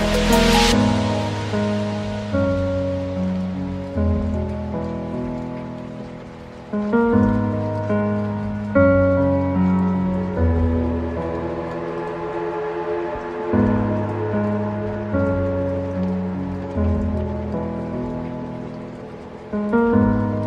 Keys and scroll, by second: 8.2 ctrl+i, 19.2 ctrl+space, 20.1 ctrl+0.